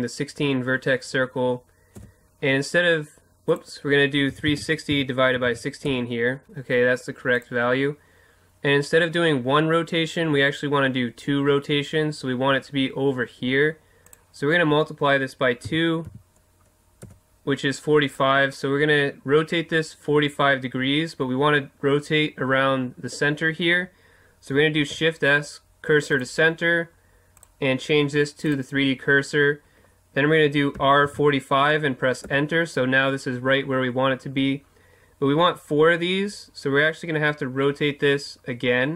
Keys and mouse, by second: 24.8 shift+s, 27.4-29.3 drag, 30.7 r.